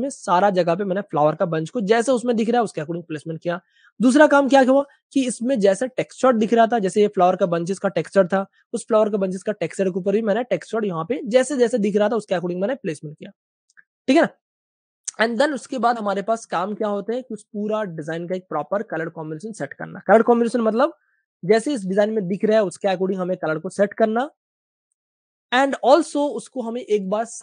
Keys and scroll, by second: 7.7 super+z, 15.9-17.8 typing, 20.8 typing, 26.9 Page_Up.